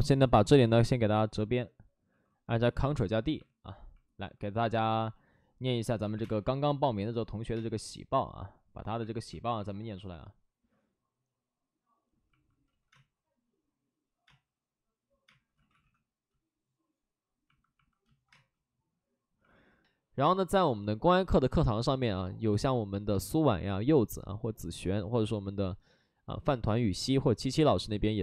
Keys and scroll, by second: 1.5 ctrl+d, 2.0 ctrl+d, 2.4 2, 4.6 space, 5.8 ctrl+z, 6.0 3, 10.4 space, 12.6 ctrl+z, 12.8 space, 14.1-16.4 typing, 15.4 ctrl+z, 18.2 space.